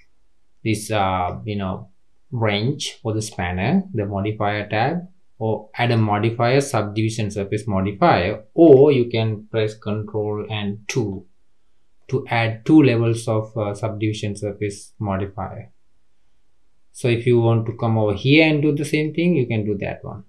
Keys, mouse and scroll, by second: 1.1 click, 5.8 click, 8.6 click, 11.2 ctrl+2, 11.9-14.1 middle drag, 14.1-17.1 scroll up 1, 17.6-18.9 drag, 19.5 click.